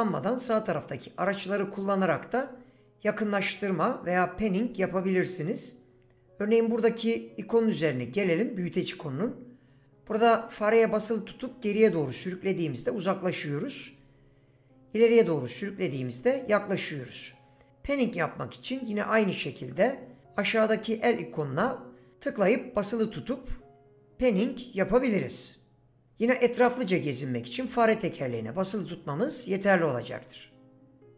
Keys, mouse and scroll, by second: 21.4-23.3 drag.